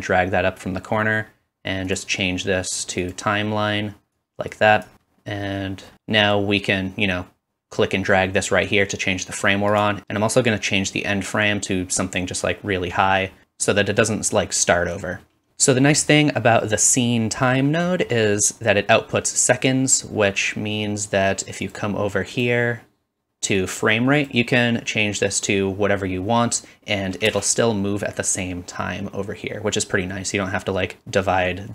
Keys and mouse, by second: 9.8-11.2 middle drag, 11.2-21.7 drag, 13.4 space, 15.5 space, 21.7-22.3 middle drag, 22.3 click, 22.4-24.2 middle drag, 24.2-31.7 drag, 27.3 space.